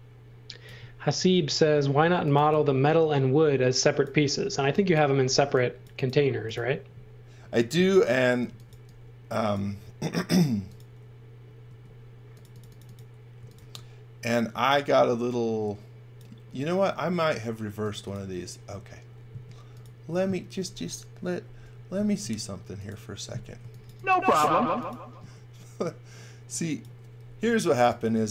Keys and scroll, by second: 1.1 space, 2.1 x, 2.4 v, 4.5 x, 4.9 v, 5.2 space, 8.2-9.1 typing, 10.2 m, 11.6 space, 13.1-14.0 typing, 17.4 space, 19.2 space, 21.6 m, 22.2 space, 23.3-24.4 typing, 27.5-28.3 typing.